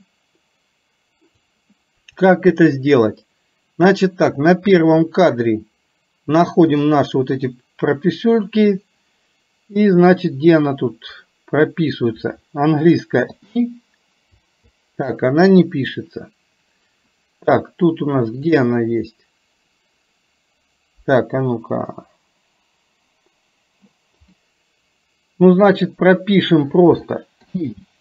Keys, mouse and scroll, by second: 4.1 click, 18.4 click.